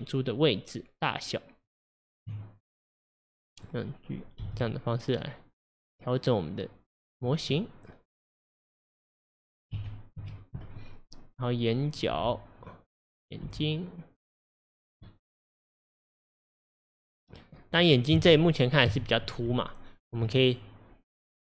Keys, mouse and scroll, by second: 3.4 click, 4.5 g, 7.1 click, 7.6-9.8 middle drag, 9.8 KP_1, 10.2 KP_3, 11.0-11.8 scroll up 1, 11.8 click, 12.2 g, 13.1 click, 13.5 g, 15.1-17.6 middle drag, 17.6-18.2 scroll down 2, 18.2 KP_1, 18.9 KP_3, 19.5 Tab, 20.5 click.